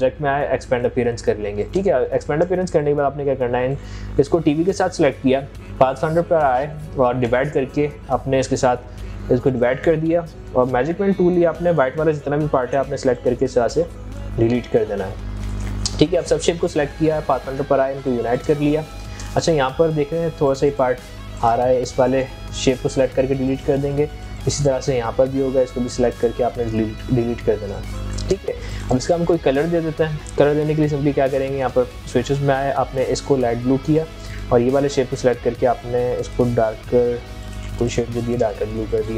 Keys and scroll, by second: 15.5 ctrl+a, 22.0 ctrl+x, 26.5 ctrl+x.